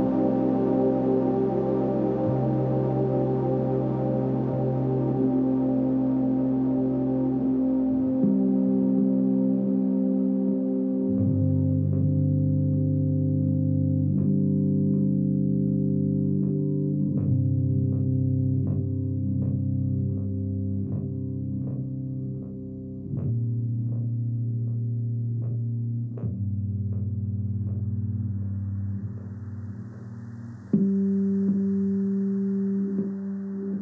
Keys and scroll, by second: 28.0 ctrl+z.